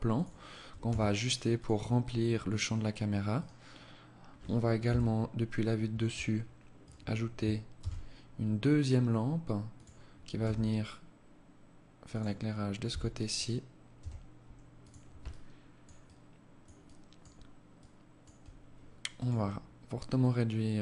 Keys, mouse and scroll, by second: 0.1 s, 2.7 right click, 4.2 KP_7, 4.9-5.7 scroll down 5, 6.1 right click, 7.1 shift+d, 9.7 r, 12.1 g, 13.3 r, 14.6 alt+click, 15.3 alt+click, 16.1 alt+click, 17.1 alt+click, 18.5 right click, 19.5 click.